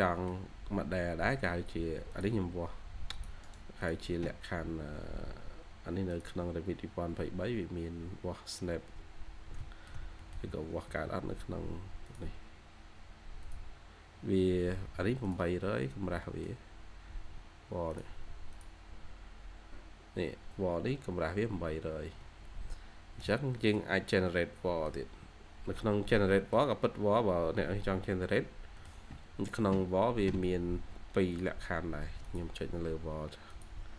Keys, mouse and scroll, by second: 0.0-0.4 scroll up 1, 3.3 right click, 8.8 scroll down 1, 9.5 middle click, 10.1 middle click, 10.4-10.8 typing, 12.7 scroll up 1, 12.8-13.5 typing, 15.7-16.1 scroll down 1, 16.1 middle click, 16.7 scroll up 1, 18.7 scroll down 1, 20.6-21.0 scroll up 1, 21.6 Escape, 21.8 Escape, 22.2-22.7 scroll down 1, 23.1 scroll down 2, 25.3 scroll up 1, 26.2 middle click, 26.8-27.1 scroll up 1, 28.0-28.3 scroll down 1, 28.7 middle click.